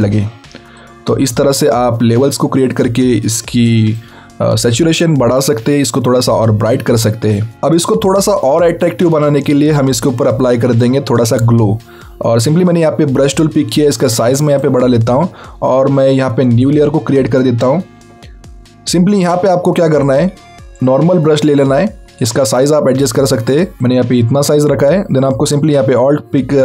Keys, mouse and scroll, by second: 1.5 click, 7.2 click, 10.8 click, 13.9 alt+right click, 16.7 click, 20.0 right click, 20.8 click, 22.6 alt+right click.